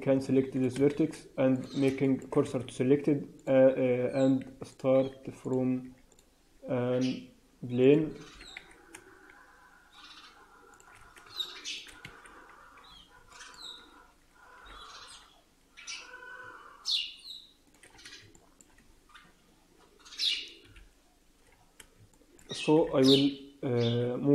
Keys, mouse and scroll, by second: 0.5 click, 0.7 shift+s, 1.9 shift+middle click, 2.4 shift+a, 4.3 s, 4.9 s, 5.7 s, 6.4 s, 8.2 g, 12.7 scroll down 4, 13.2 shift+middle click, 13.7-14.1 scroll up 1, 14.5 g, 17.8 scroll down 4, 18.3 shift+middle click, 20.6 KP_1, 21.5 scroll down 1, 22.0 shift+middle click, 22.8 e.